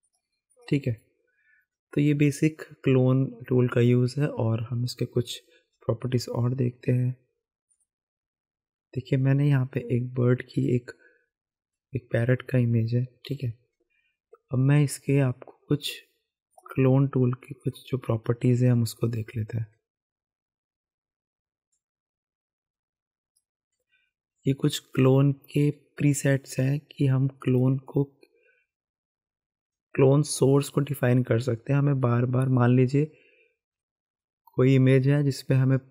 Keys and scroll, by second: 13.3 v.